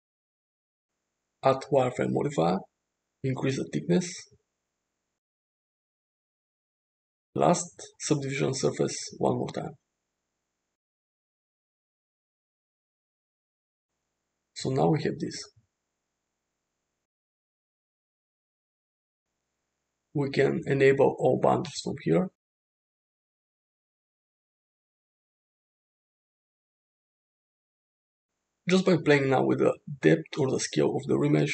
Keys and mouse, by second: 3.3-5.5 drag, 7.5-10.3 drag, 11.9 click, 12.7 click, 14.5-16.0 middle drag, 17.6 click, 20.3 click, 23.9 click, 25.5 click, 27.2-28.0 middle drag, 29.3 click, 31.2-31.5 drag.